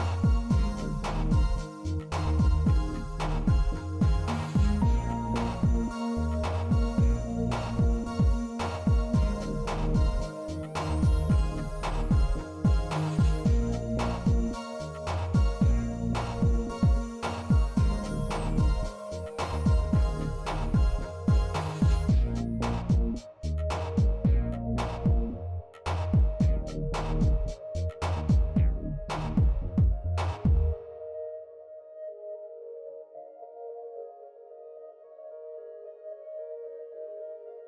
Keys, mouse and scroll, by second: 2.2 click, 9.0-10.4 drag, 12.4-12.9 middle drag, 13.1-13.5 shift+middle drag, 16.5-20.2 middle drag, 22.7-23.1 middle drag, 23.9-24.4 middle drag, 24.9-25.7 middle drag, 27.9-28.8 middle drag, 31.7 shift+a, 33.9 s, 36.3 middle drag, 36.8 s.